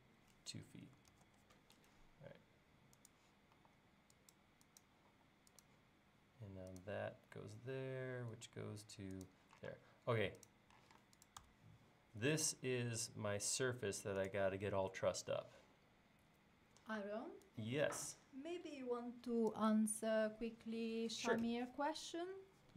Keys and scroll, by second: 0.8-2.0 typing, 3.6 e, 5.2 l, 9.8 space, 10.9 m.